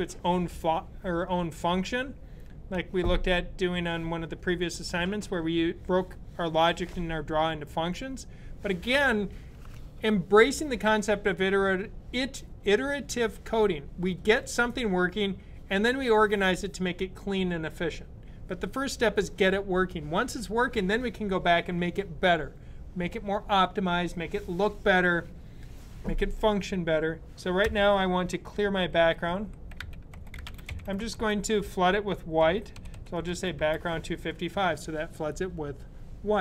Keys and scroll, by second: 28.7-31.0 typing, 32.2-33.2 typing.